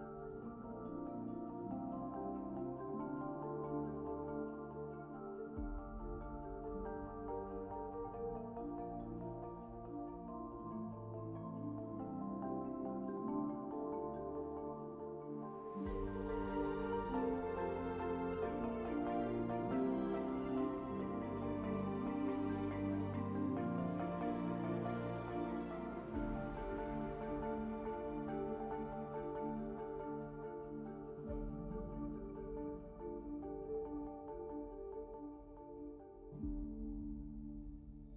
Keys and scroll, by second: 2.8 `, 3.1 4, 5.9 alt+z, 6.2 b, 15.7 2, 17.0 ctrl+d, 20.6 ctrl+alt+s, 28.3 ctrl+z, 28.8 s, 29.2 2, 32.3 w, 36.2 1, 37.8 shift+d.